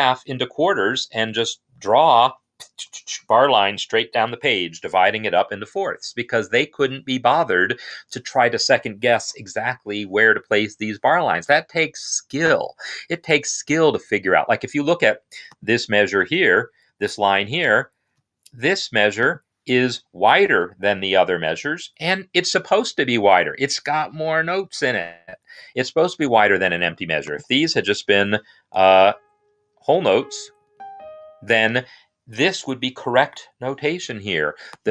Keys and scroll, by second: 27.3 n, 29.3-30.3 typing, 30.5 Right, 30.6 Right, 31.3 Escape, 31.5 typing.